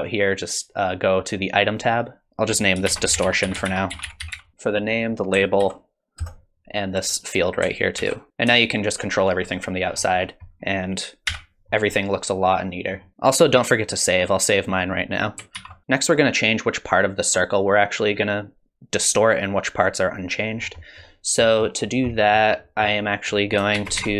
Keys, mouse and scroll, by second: 1.7 click, 4.9 click, 7.1 click, 8.5 click, 9.9-11.3 scroll down 12, 11.3-12.3 scroll down 5, 11.3 n, 11.9 middle click, 15.6 ctrl+s, 20.6-21.4 scroll down 4, 20.8 middle click, 21.4 middle click, 21.8-22.3 scroll up 4, 22.1 middle click, 22.6 middle click, 23.3 click, 23.7 shift+a.